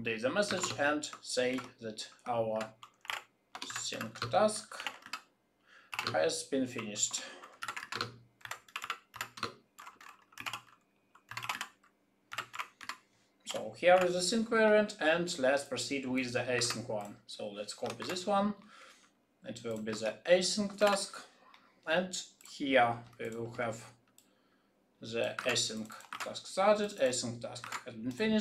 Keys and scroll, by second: 2.5 shift+s, 16.7 ctrl+c, 17.9 ctrl+c, 17.9 ctrl+v, 19.9 shift+a, 25.3 ctrl+c, 26.1 ctrl+v, 27.6 ctrl+v.